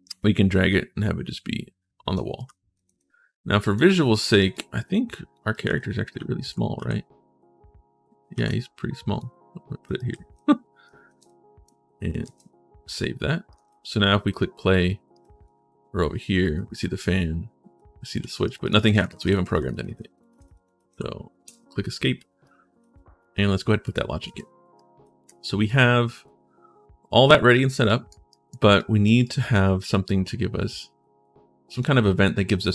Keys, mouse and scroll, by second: 2.0-3.1 typing, 2.2-3.5 right drag, 4.3 click, 5.2-6.7 typing, 5.3-8.2 right drag, 8.1 s, 8.2 middle click, 9.0 click, 9.6-11.0 typing, 9.7-11.4 right drag, 13.3 click, 13.4 s, 14.1 click, 14.9 right click, 15.2 w, 16.3 a, 17.5-20.7 typing, 18.2 right click, 18.4 right click, 18.7 right click, 19.0 right click, 19.3 right click, 19.5 right click, 20.0 right click, 20.1 right click, 20.4 right click, 23.7 3, 24.5 right click, 25.4 click, 25.4 right click, 26.0-27.9 right drag.